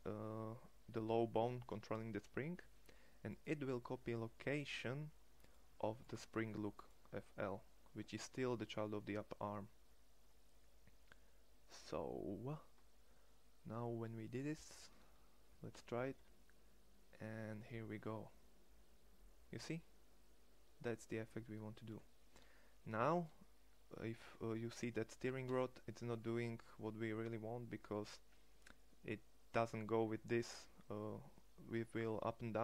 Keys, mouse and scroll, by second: 15.6 g, 22.4-23.3 middle drag, 25.3 g, 26.3-27.0 middle drag.